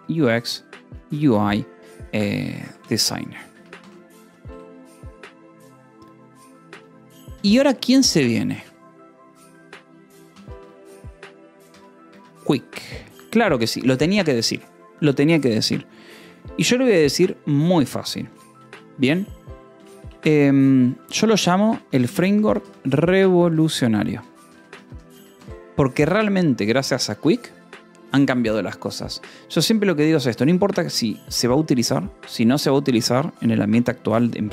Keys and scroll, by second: 0.1 /, 1.1-4.1 typing, 4.4 Return, 7.8 space, 10.7-13.1 typing, 18.6 space, 19.7 BackSpace, 20.8-24.2 typing, 25.0 Escape, 25.8 k, 26.3 j, 27.0 Escape.